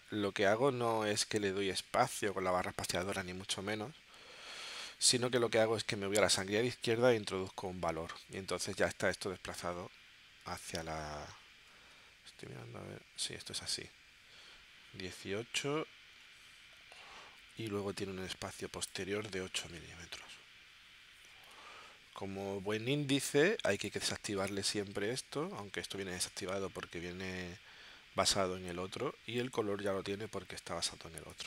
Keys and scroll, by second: 6.5-7.4 typing, 7.7 Tab, 11.8 super+Tab, 19.7 8, 21.4 Tab.